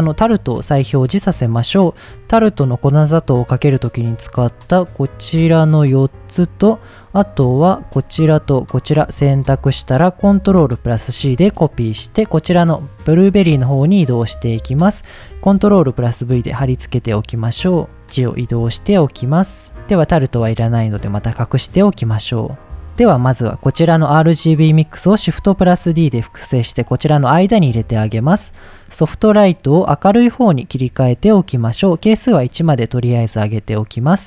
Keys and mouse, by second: 0.3 click, 4.2 middle click, 4.7 click, 6.1 middle click, 8.1 shift+click, 8.6 shift+click, 10.9 ctrl+c, 12.1 click, 14.2 middle click, 15.2 ctrl+v, 16.2-18.0 drag, 18.2 click, 18.7 shift+click, 19.0 click, 19.9 drag, 21.3 click, 22.1 middle click, 23.6 click, 24.4 middle click, 25.6 shift+d, 26.3 drag, 28.2 middle click, 28.8-30.9 drag, 31.9 click, 33.8 middle click.